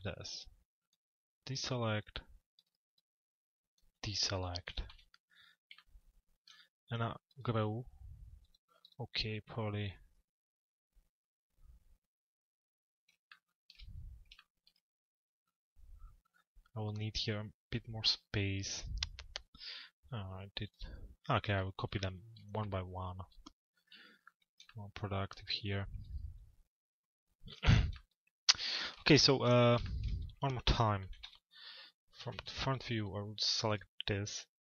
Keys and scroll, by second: 4.2 t, 23.5 p, 30.6 t, 32.0-32.9 typing.